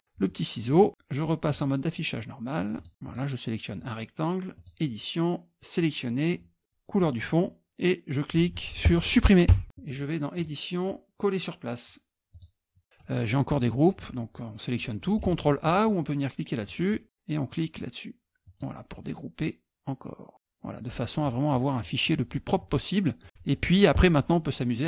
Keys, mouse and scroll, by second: 0.7 click, 1.5 click, 2.8 click, 3.1 click, 4.6 click, 6.9 click, 10.4 click, 12.3 click, 13.5 click, 15.2 ctrl+a, 15.6 click, 16.7 click, 18.5 click, 21.2-22.2 scroll up 8, 22.3-22.7 scroll down 2, 23.2 click, 24.7 middle click.